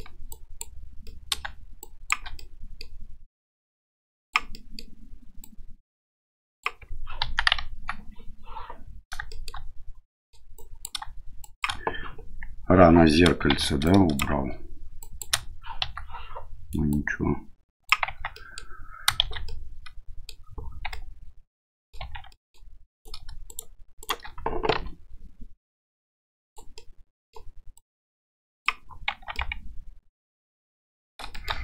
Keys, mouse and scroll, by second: 0.3 click, 1.0 middle click, 1.9 shift+click, 2.4 middle click, 3.3-4.3 drag, 4.6 middle click, 5.4-6.6 drag, 7.2 KP_1, 7.8 KP_3, 9.4 shift+middle click, 10.1 middle click, 10.6 click, 11.4 shift+click, 13.5 shift+z, 13.8 click, 15.1 click, 15.8 KP_3, 16.9-17.9 drag, 18.1 Tab, 18.3 middle drag, 19.2 shift+z, 19.4 middle click, 20.9-21.9 middle drag, 22.0 Tab, 22.3 middle click, 22.9 right click, 23.5 shift+right click, 24.0 shift+right click, 24.7 o, 25.6-26.6 drag, 26.7 middle click, 27.8 click, 29.1 Tab, 29.3-31.1 middle drag, 31.3 middle click.